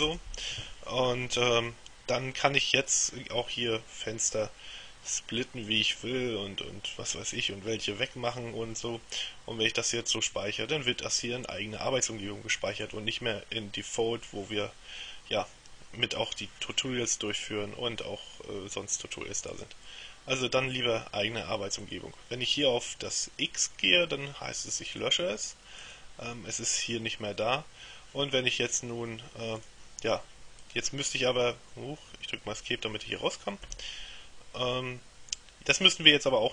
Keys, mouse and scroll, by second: 0.2 Return, 4.4-6.3 drag, 12.9 click, 13.9 click, 19.6 click, 21.9 click, 25.0 click, 25.9 click, 29.7 click, 30.7 click, 33.7 Escape, 35.8 click.